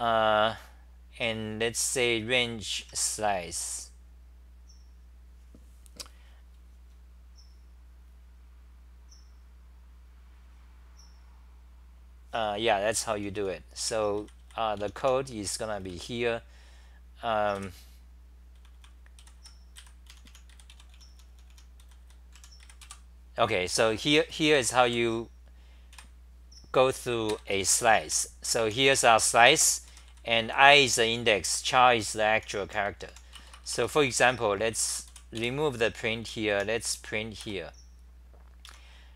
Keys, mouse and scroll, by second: 0.0-0.1 typing, 2.7 h, 2.8 h, 12.9-15.8 typing, 17.5-24.4 typing, 25.9 2, 27.3 ctrl+g, 27.8-37.0 typing, 29.4 ctrl+g, 33.7 Return, 38.7 Home.